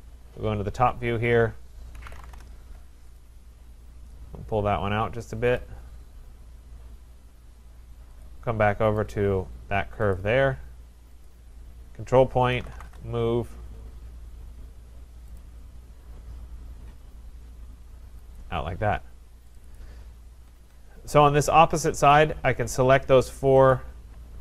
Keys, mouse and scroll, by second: 0.8-1.4 scroll, 1.8-2.7 typing, 3.2 click, 5.6 click, 6.0-6.3 scroll, 8.2 click, 9.1 click, 10.1 click, 11.3 click, 12.3-13.3 typing, 13.8-14.2 scroll, 14.3 Return, 14.8-15.1 scroll, 15.4 click, 18.4 click, 19.6 click, 19.8 click, 20.4 Escape, 20.6 Escape, 20.9-22.1 scroll, 22.1 click, 23.7 click, 24.2-24.4 scroll.